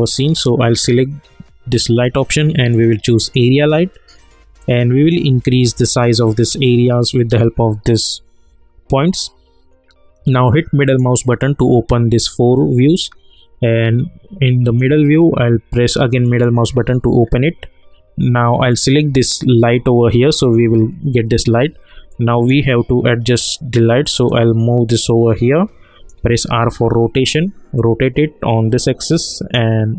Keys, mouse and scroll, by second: 0.4-10.8 drag, 10.8 middle click, 14.6 click, 16.2 middle click, 17.2 scroll down 1, 18.7 click, 20.2 scroll down 1, 20.6-21.0 scroll up 1, 21.0 scroll down 1, 22.1-24.3 alt+middle drag, 24.3-26.4 drag, 26.4 r, 27.7-29.9 drag.